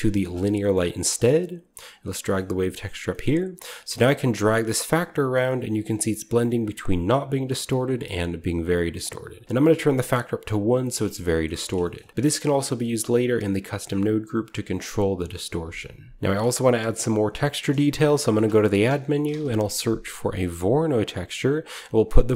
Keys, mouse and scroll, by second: 0.1 click, 0.4-1.9 scroll down 2, 1.1 middle click, 1.9-2.8 scroll down 1, 2.5 middle click, 2.8-8.6 scroll up 1, 3.5-8.6 middle drag, 9.3 click, 11.1-11.4 shift+middle drag, 11.3 shift+scroll up 1, 11.7 shift+middle click, 12.2-14.7 drag, 14.5 right click, 16.2-17.1 scroll up 1, 16.3-17.4 middle drag, 17.1-19.2 scroll up 1, 17.5-21.4 middle drag, 17.9 typing, 18.3-21.4 shift+drag, 19.1 typing, 21.5 click.